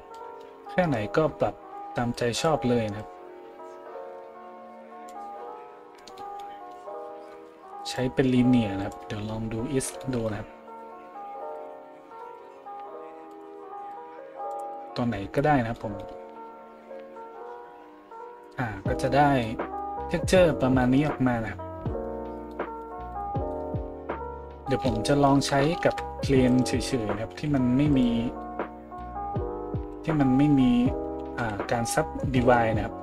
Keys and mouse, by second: 23.1 middle click, 23.1 right click, 23.8 a, 25.8 shift+a, 27.3 g, 28.0-33.0 middle drag, 28.8 s.